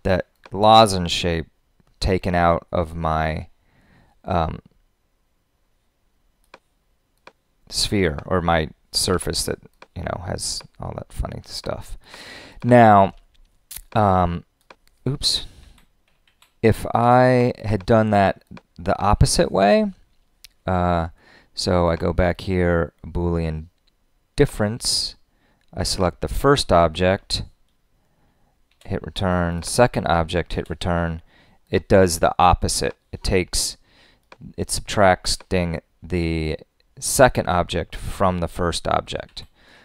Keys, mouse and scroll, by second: 15.6 super+z, 28.7 Return, 39.2 super+z.